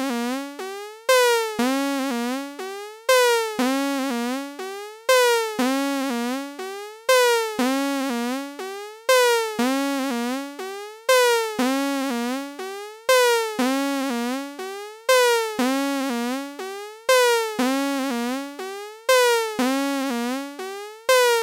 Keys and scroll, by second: 10.1 super+Tab.